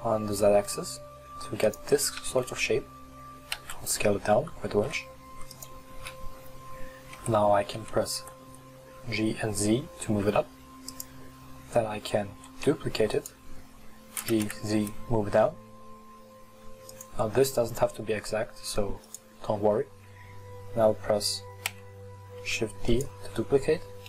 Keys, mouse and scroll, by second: 2.2 Tab, 3.6 s, 7.2 g, 12.5 shift+d, 14.3 g, 19.1 right click, 21.8 shift+d.